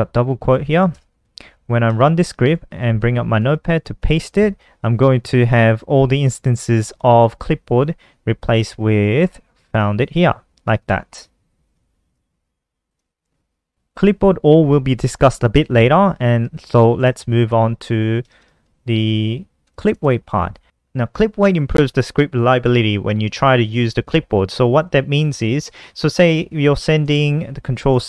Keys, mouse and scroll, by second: 0.1 Right, 0.3 BackSpace, 0.6 End, 0.9 ctrl+s, 1.3 F5, 1.9 super+n, 2.8 alt+click, 3.1 click, 3.3 ctrl+v, 5.6 click, 9.2 click, 10.7 click, 11.5 click, 12.3 click, 12.4 alt+F4, 12.6 n, 13.1 click, 13.7 ctrl+s, 16.0 click, 16.6 shift+Home, 16.9 Delete, 17.0 Delete, 17.2 Delete, 17.4 Delete, 18.4 Up, 18.8 Down, 19.0 Return, 19.2 Return, 19.4 Return, 19.6 Up, 20.6 Down, 24.4 Up, 25.6-27.3 typing.